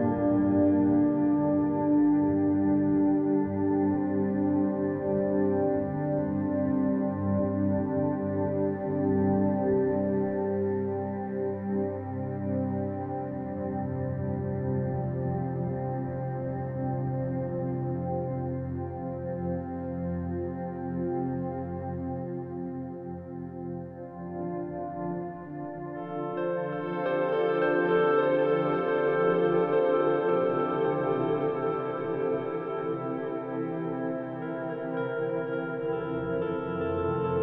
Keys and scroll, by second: 3.3 z, 4.0 z, 4.4 f, 9.4 z, 11.9 e, 11.9 ctrl+alt+1, 12.2 ctrl+alt+1, 12.4 z, 12.7 b, 14.8 e, 16.3-19.3 typing, 19.0 ctrl+alt+1, 19.2 ctrl+alt+1, 25.1 z, 26.8 z, 36.6-37.4 typing.